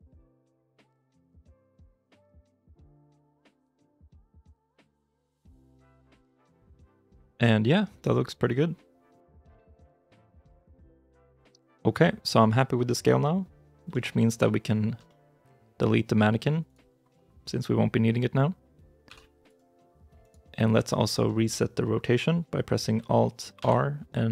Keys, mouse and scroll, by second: 0.7 g, 1.2 shift+click, 2.1 g, 2.6 shift+click, 2.9 scroll up 1, 3.0 middle click, 3.4 shift+middle click, 3.7 middle click, 4.1 r, 5.0 g, 5.3 shift+click, 5.6 middle click, 7.1 scroll up 1, 7.9 middle click, 9.5 scroll down 1, 10.2 shift+i, 10.5-11.4 shift+scroll down 2, 14.9 shift+middle click, 16.5 right click, 20.1 right click, 20.8 shift+i, 23.4 alt+r.